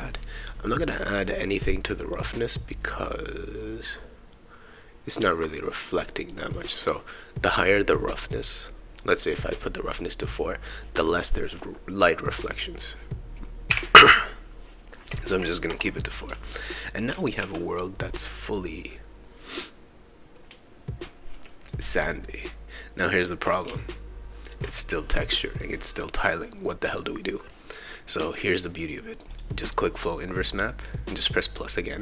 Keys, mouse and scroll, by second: 0.4-7.4 right drag, 9.0-10.2 drag, 12.3 click, 12.5 click, 15.0-24.6 right drag, 16.3 e, 17.4 w, 20.5 a, 23.7 shift+e, 25.6-27.2 right drag, 29.3 click, 31.2 click.